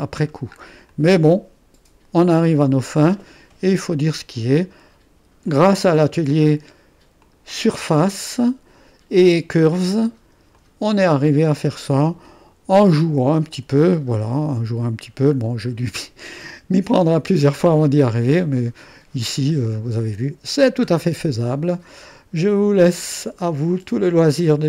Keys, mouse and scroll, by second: 0.9-3.8 drag, 5.5-7.0 drag, 7.2-8.2 drag, 10.5 click, 13.8-14.9 middle drag, 14.9-15.4 scroll up 1, 15.4-15.9 scroll down 2, 15.9-16.9 drag, 20.0-20.6 scroll up 2, 20.6-21.1 scroll down 2, 21.1-24.2 drag.